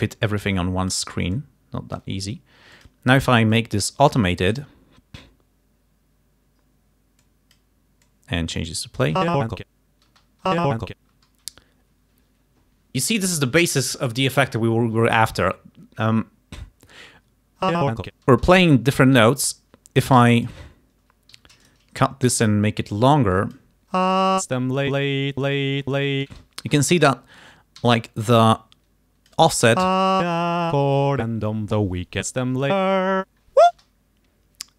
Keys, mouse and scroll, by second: 1.4-2.3 scroll up 2, 2.8 click, 3.6-4.8 drag, 7.3 click, 8.2 click, 9.3 space, 10.2 space, 11.2 space, 17.7 space, 18.4 space, 20.3 g, 20.4 click, 21.5 s, 21.7 shift+right click, 22.4 shift+t, 22.4-23.8 drag, 24.0 space, 26.3 space, 27.9 g, 28.6 click, 29.9 space, 33.8 space.